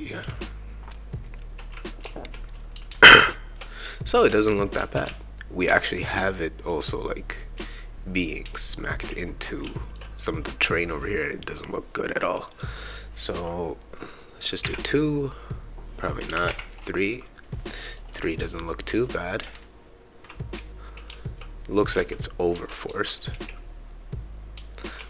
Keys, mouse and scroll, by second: 0.2 d, 2.0 e, 2.7 e, 4.5-5.5 typing, 6.3 right click, 7.5-9.9 right drag, 7.5 s, 8.7 shift+q, 9.6 shift+w, 12.5 click, 12.7 click, 16.3 BackSpace, 17.9 right click, 18.0 right click, 18.3-22.1 right drag, 18.8 s, 19.4 shift+s, 20.5 shift+q, 21.0 shift+w, 22.5 e, 22.9 w, 24.6-25.0 typing.